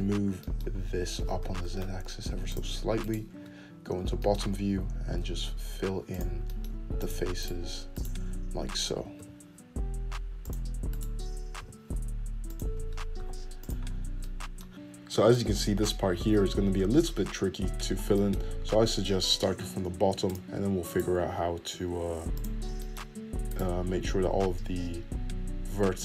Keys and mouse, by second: 0.2 ctrl+z, 0.8-3.4 shift+drag, 2.0 g, 3.4 middle click, 3.9 click, 4.0-5.2 middle drag, 4.2 `, 6.1 f, 7.8 click, 8.3 click, 8.8 click, 10.0 f, 11.8 click, 12.4 f, 13.9 middle click, 14.0 g, 20.2 f, 21.7 click, 22.1-24.3 middle drag, 22.1 f, 24.3 click, 24.4-26.0 middle drag, 25.1 f.